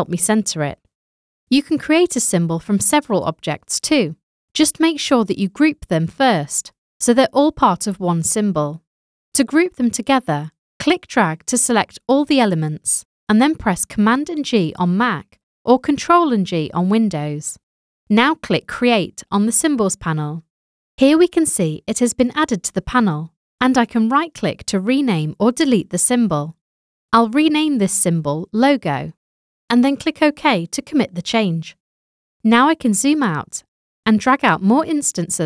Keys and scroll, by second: 28.9-30.3 typing, 32.9 super+0.